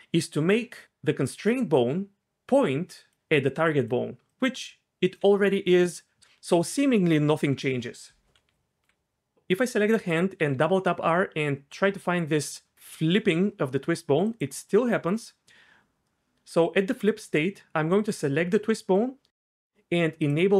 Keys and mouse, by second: 1.2 click, 8.5 d, 8.8 d, 10.4 r, 10.5 r, 18.0 click, 20.2 click.